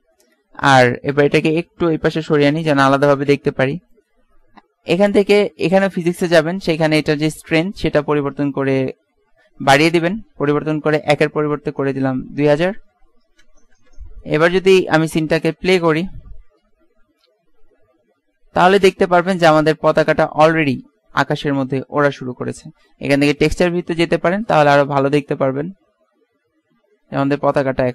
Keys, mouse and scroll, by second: 1.8-2.8 drag, 7.6-9.6 drag, 12.9 KP_0, 15.2 alt+a, 19.9-21.3 middle drag, 23.6 alt+z.